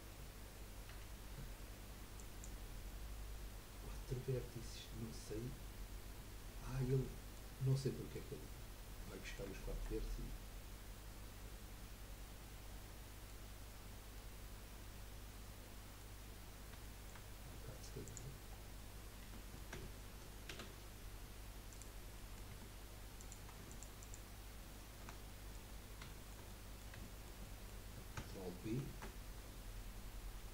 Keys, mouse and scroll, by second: 2.6 F3, 6.1-6.9 scroll up 3, 7.0-8.3 shift+middle drag, 8.3-9.1 scroll down 1, 9.1-13.3 middle drag, 13.6-14.1 scroll up 1, 14.1-16.2 middle drag, 16.2 scroll down 1, 16.8 shift+middle click, 17.3-18.0 scroll up 2, 18.0 click, 18.5-19.2 scroll down 2, 19.3 Tab, 20.5 ctrl+a, 22.3 middle click, 22.5 Tab, 23.2 click, 23.7 alt+shift+click, 24.0 alt+shift+click, 25.2 middle click, 25.7-26.1 scroll up 2, 26.1-28.8 shift+middle drag, 28.8 ctrl+b.